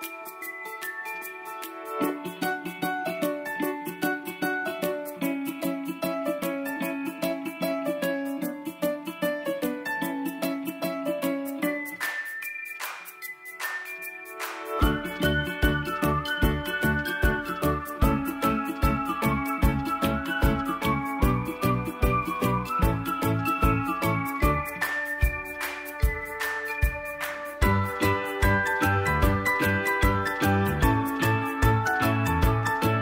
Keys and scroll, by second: 1.9 ctrl+shift+v, 9.1 ctrl+j.